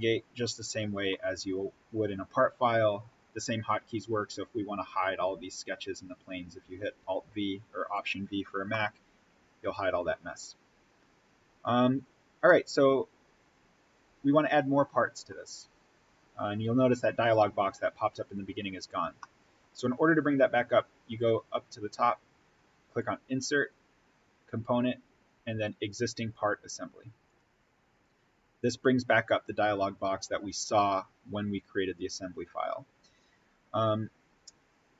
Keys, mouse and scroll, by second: 1.4-2.8 scroll down 1, 6.5-6.9 scroll down 1, 7.9 click, 8.6-11.4 middle drag, 11.4-11.8 scroll up 1, 12.4-17.5 middle drag, 19.1-22.4 middle drag, 22.8 click, 27.1 click.